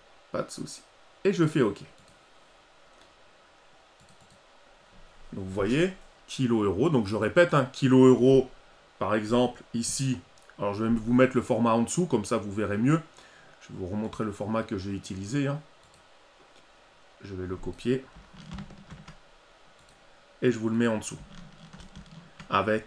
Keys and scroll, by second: 18.4 ctrl+c, 21.7 ctrl+v.